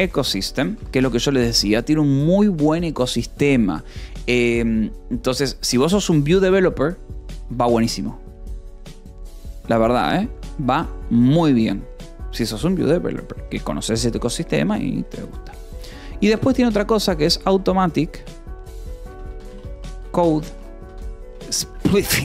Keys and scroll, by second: 0.0-1.3 typing, 2.0 ctrl+s, 11.1 :, 11.3 space, 17.0-22.2 typing.